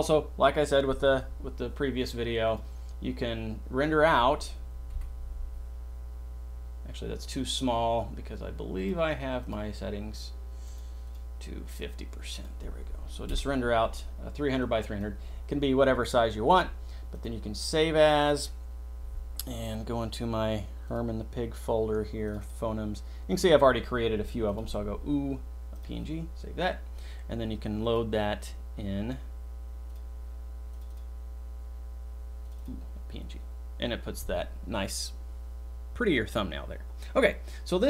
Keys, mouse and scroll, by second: 2.4 click, 3.7 click, 5.0 F12, 9.4 click, 11.0 click, 11.8 click, 15.0 F12.